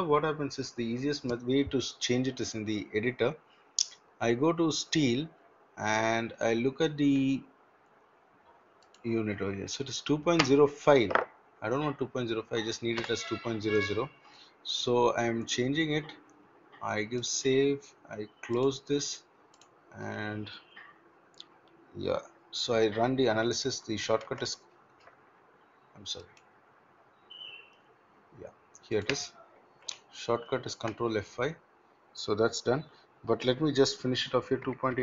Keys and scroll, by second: 24.2 ctrl+F5, 30.7 ctrl+F5.